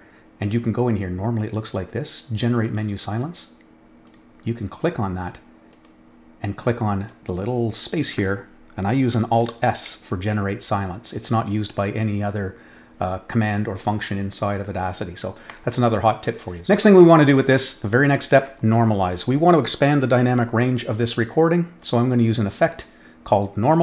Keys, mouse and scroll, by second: 2.6 click, 4.0 click, 5.7 click, 7.0 click, 9.5 alt+s, 15.4 click, 17.4 click, 17.5 click, 22.0 click.